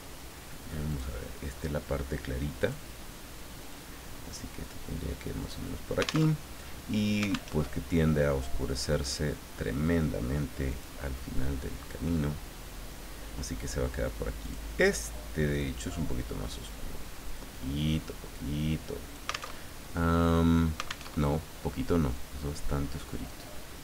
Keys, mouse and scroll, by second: 0.9 click, 2.6 click, 3.7-5.7 drag, 6.3 alt+Tab, 7.5 alt+Tab, 9.0 click, 10.7 click, 14.4 click, 15.6-19.5 drag, 19.5 alt+Tab, 21.1 alt+Tab, 22.1-23.8 drag.